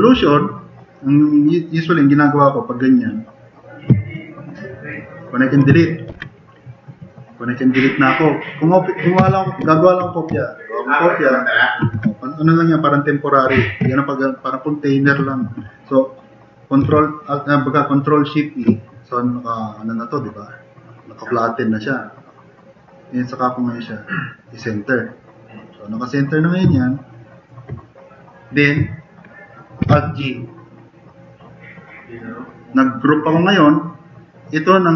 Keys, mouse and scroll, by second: 6.1 ctrl+shift+e, 9.3 ctrl+z, 9.6 ctrl+z, 16.9 ctrl+shift+e, 29.8 alt+g.